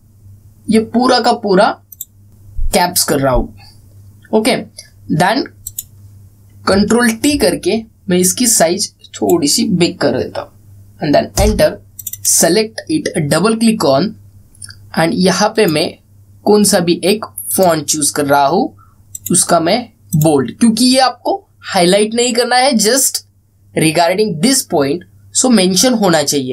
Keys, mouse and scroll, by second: 1.4-2.2 scroll down 1, 2.2 click, 6.4 click, 8.0 ctrl+t, 9.2-10.2 drag, 12.0 Return, 12.7 click, 16.3 click.